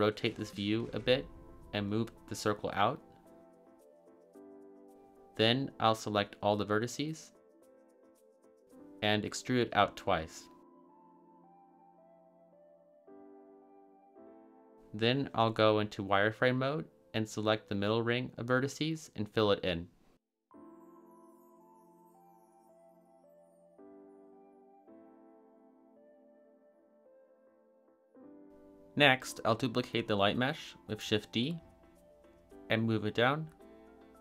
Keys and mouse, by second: 1.1 middle click, 2.0 g, 2.9 y, 4.8 drag, 5.2-5.8 middle drag, 7.3-7.9 drag, 8.9 e, 9.6 y, 10.9 click, 11.6 e, 12.4 y, 15.9 z, 17.7 a, 17.8 a, 18.2 b, 20.2 f, 21.1 z, 22.3 a, 23.7-24.4 drag, 24.9 a, 25.1 a, 25.5-26.2 middle drag, 25.7 a, 26.9-27.7 middle drag, 28.0 z, 28.5 shift+d, 29.3 click, 30.8 g, 31.6 z, 33.3 click, 33.8 shift+drag.